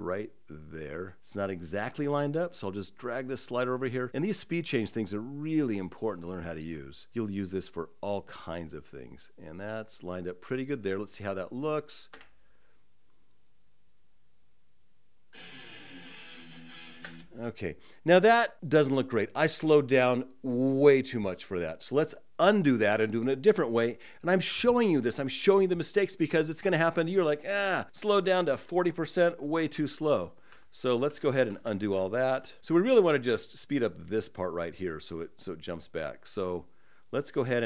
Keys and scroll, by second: 29.5 super+z, 30.3 super+z, 30.8 super+z, 31.5 super+z.